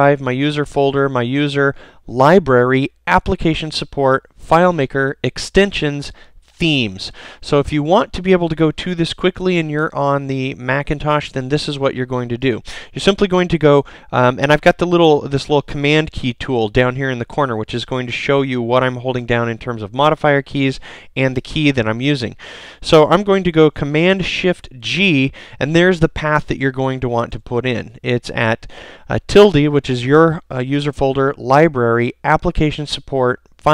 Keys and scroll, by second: 9.9 super+c, 23.5 shift+super+g, 27.2 super+c.